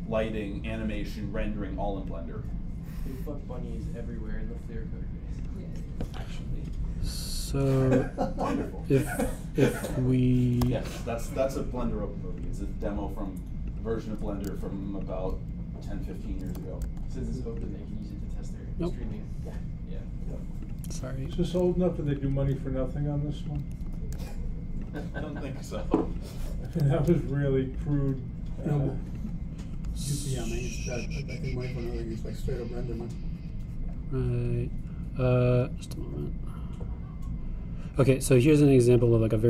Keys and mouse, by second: 2.0-6.4 drag, 7.7-13.5 drag, 11.6 g, 14.8-16.2 drag, 15.2 g, 17.2-18.8 drag, 17.6 g, 21.6-23.4 drag, 22.3 g, 24.5-25.9 drag, 24.9 g, 27.2-28.8 drag, 27.8 g, 30.2-32.1 drag, 38.5-39.4 drag.